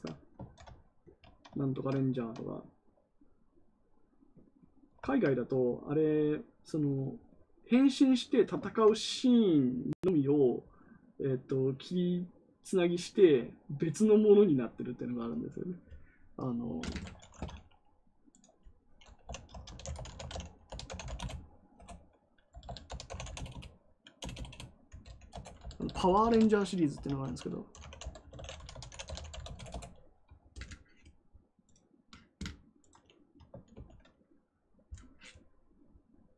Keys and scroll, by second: 19.1-21.3 typing, 21.7 Return, 22.4-24.4 typing, 25.2 Return, 25.5-29.6 typing, 33.6 ctrl+c.